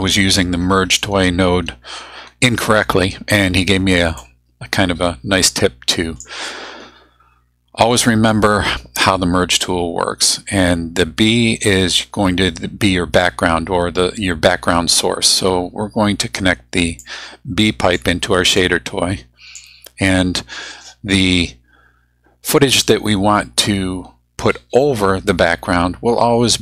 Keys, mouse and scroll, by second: 4.2-6.4 drag, 17.0-18.1 drag, 18.6-19.7 drag.